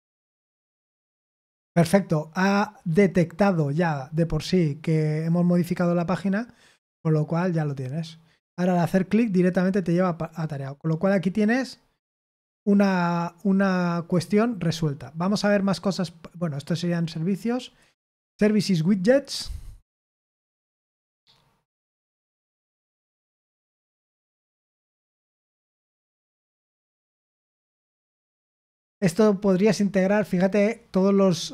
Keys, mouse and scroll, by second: 6.7 click, 10.3 click, 13.9 click, 15.2 click, 16.6-17.6 scroll down 1, 17.6 click, 24.1-25.3 scroll down 1, 25.3 scroll down 1, 27.8 scroll down 2, 29.7 scroll down 2, 30.3 scroll down 2.